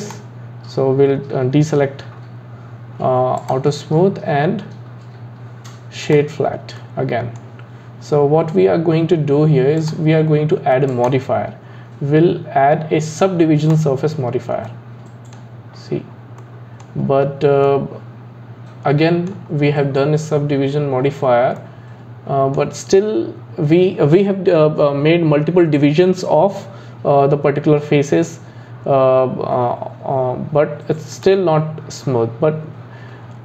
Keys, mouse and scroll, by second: 0.0 click, 3.4-6.4 drag, 6.8-9.8 middle drag, 9.8 click, 12.8 click, 13.8 click, 14.7-15.7 middle drag, 15.7-16.4 scroll up 3, 16.4-17.1 middle drag, 17.1-17.7 scroll down 2, 17.7-20.8 middle drag, 21.6-24.7 middle drag, 31.1-33.4 drag.